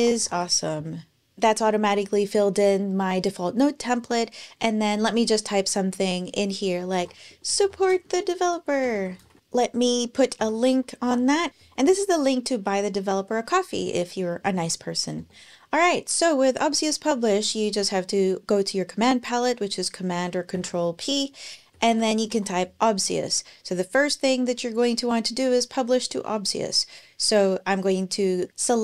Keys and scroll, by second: 0.0-0.6 typing, 6.5-9.8 typing, 10.2 super+k, 10.8 super+v, 11.5 BackSpace, 11.6 BackSpace, 14.3 super+Right, 15.0 Return, 20.4 super+p, 21.2-22.6 typing.